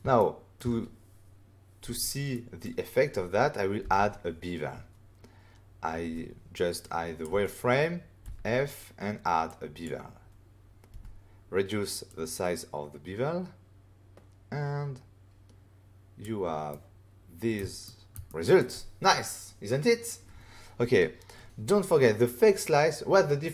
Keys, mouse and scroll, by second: 0.1 ctrl+middle click, 0.5 middle click, 2.3 middle click, 3.8 f, 6.8 click, 8.2 f, 9.4 click, 10.9 f, 12.0 click, 16.7 middle click, 17.8 ctrl+middle click, 18.2 middle click.